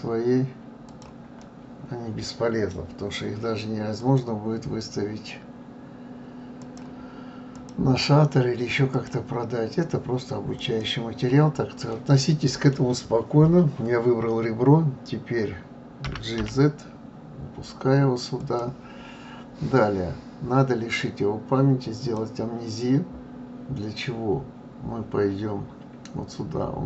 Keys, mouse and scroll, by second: 1.4-3.9 middle drag, 3.9 click, 6.6-9.0 drag, 10.6 click, 11.9-14.9 middle drag, 16.0 g, 21.0 click.